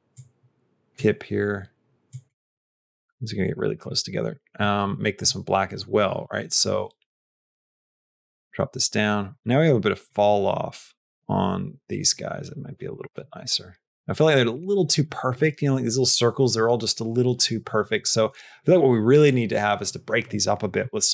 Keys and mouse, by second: 0.0 click, 1.9 click, 2.4 click, 2.9 click, 3.7 click, 4.4 click, 5.1 click, 5.5 click, 7.3 click, 10.0-12.5 drag, 12.9 click, 14.6 click.